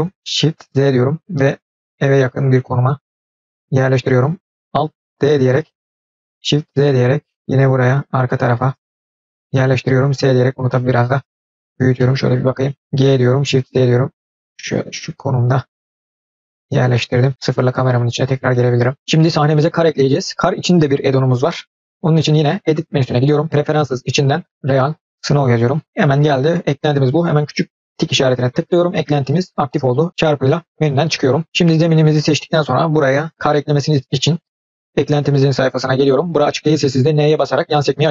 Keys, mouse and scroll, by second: 5.1 alt+d, 10.0 s, 11.9-12.8 middle drag, 13.1 g, 16.9-17.3 middle drag, 17.5 KP_0, 22.4-23.6 drag, 31.5 click, 34.5 click.